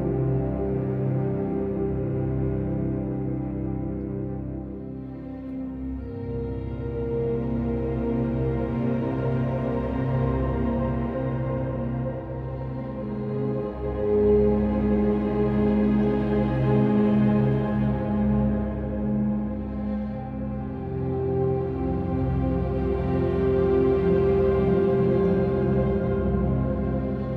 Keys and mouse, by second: 0.7 click, 4.4 g, 4.7 x, 6.3 shift+click, 7.9 KP_3, 9.3 shift+middle click, 12.5 o, 13.4 Escape, 14.3 p, 15.6 Tab, 15.9 click, 17.5-19.2 drag, 21.2 click, 21.7 click, 22.3 click, 23.5 click.